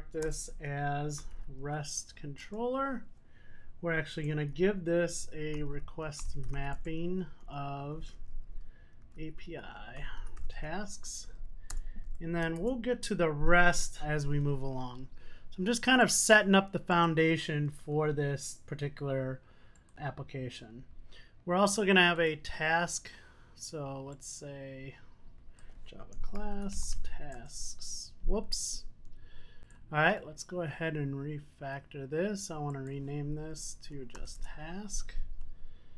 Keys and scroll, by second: 2.5 Return, 6.9 Return, 13.5 super+s.